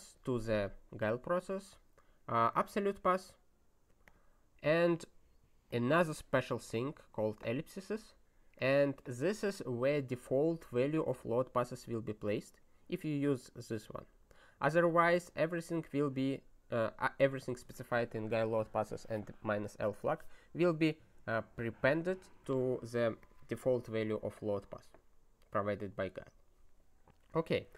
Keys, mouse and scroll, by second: 0.1 click, 2.5 click, 3.9 click, 4.0 click, 5.7 click, 7.1 click, 8.6 click, 13.7 click, 14.3 click, 15.8 click, 17.4 click, 23.2 click.